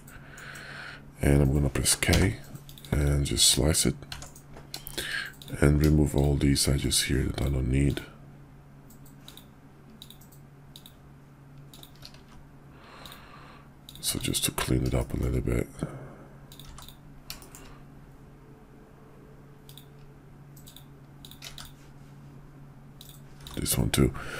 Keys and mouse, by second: 4.1 Tab, 4.8 shift+click, 4.9 shift+middle click, 5.2 click, 6.1 shift+click, 6.5 shift+middle click, 7.8 shift+click, 9.9 shift+click, 10.6 shift+click, 11.5 shift+click, 12.0 x, 13.8 click, 14.0 x, 14.9 shift+click, 16.4 click, 16.7 x, 17.3 shift+click, 19.5 click, 20.5 shift+click, 21.1 shift+click, 21.4 x, 23.4 x.